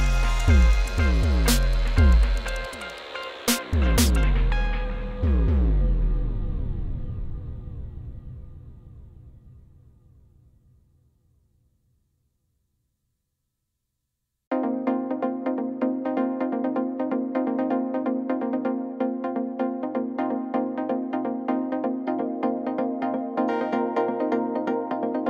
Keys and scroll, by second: 1.6-2.8 typing, 7.1 alt+a, 8.8 shift+d, 9.2 x, 10.2 7, 10.7 shift+z, 11.4 g, 11.8 shift+z, 22.4 Tab, 22.9 c, 23.6 Return, 23.8 g, 23.8 z.